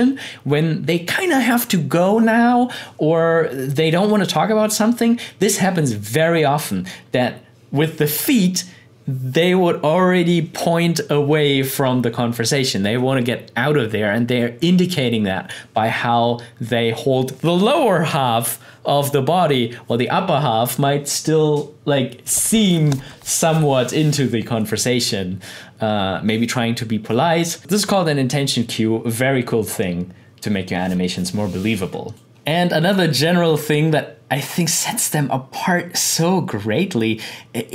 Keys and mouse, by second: 32.1 click.